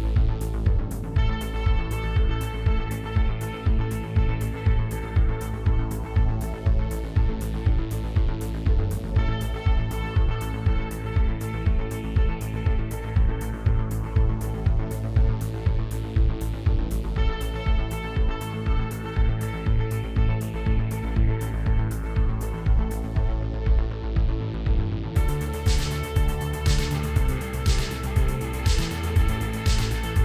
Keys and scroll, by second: 0.3 ctrl+b, 0.8 ., 1.0 0, 1.7 Return, 3.9 Tab, 8.6 Tab, 11.8 3, 13.0 shift+s, 14.0 Tab, 14.9 shift+a, 19.4 r, 19.6 y, 19.8 9, 20.4 Return, 24.9 Tab, 26.1 s, 26.6 shift+x.